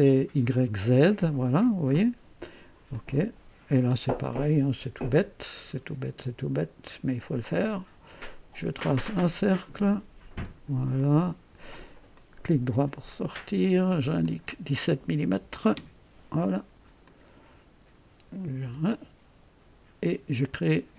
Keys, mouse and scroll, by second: 0.7 scroll down 1, 2.9 click, 3.7-4.0 scroll up 1, 4.3-5.0 right drag, 5.1 &, 6.8 click, 9.1 click, 10.4 click, 11.0 right click, 12.1 right click, 12.4 typing, 13.1 click, 14.2 click, 15.2-15.9 typing, 17.0 click, 18.6 typing.